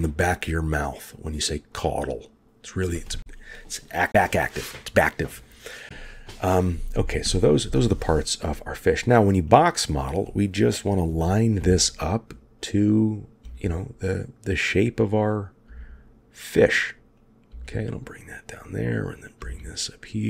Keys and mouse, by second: 9.6 click, 11.5 g, 12.9 click, 13.3 g, 15.4-16.7 drag, 15.6 g, 17.2-18.4 drag, 17.4 g, 19.0-20.2 drag, 19.3 g.